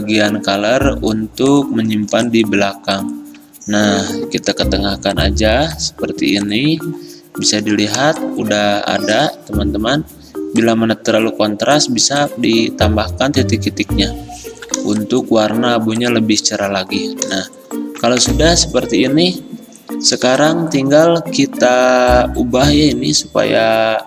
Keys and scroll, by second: 18.5 ctrl+z, 20.4 ctrl+z.